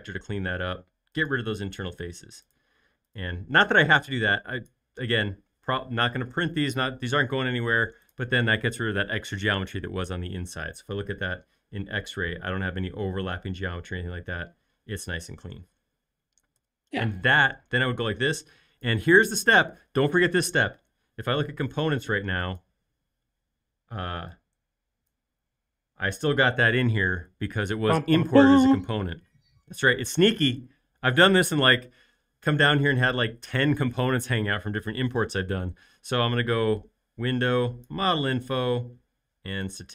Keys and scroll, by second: 11.2 x, 16.7-17.4 typing, 20.9 r.